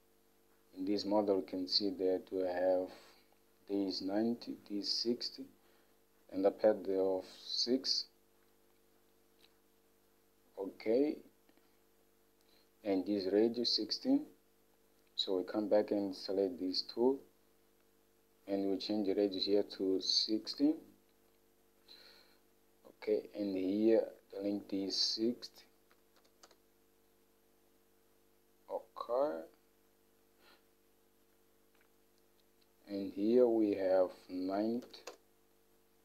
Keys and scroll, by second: 19.7-20.6 typing, 22.5-23.3 typing, 25.9-26.6 typing, 34.6-35.5 typing.